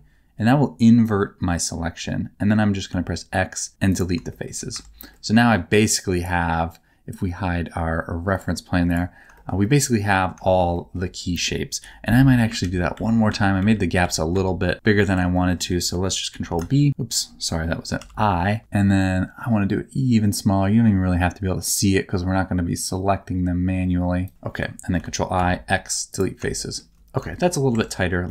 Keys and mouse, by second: 2.9 x, 4.3 shift+middle click, 4.7 Tab, 5.1 middle click, 8.3 middle click, 9.3 shift+middle click, 9.6 middle click, 10.4 shift+middle click, 10.7 middle click, 11.8 KP_7, 12.6 ctrl+z, 12.9 ctrl+z, 13.3 ctrl+z, 13.6 ctrl+z, 14.0 ctrl+z, 14.3 ctrl+z, 14.7 ctrl+z, 15.3 shift+middle click, 16.3 ctrl+b, 18.0 i, 24.2 shift+click, 24.9 ctrl+i, 25.3 x, 26.5 shift+middle click, 27.3 shift+middle click, 27.7 Tab, 28.2 middle click.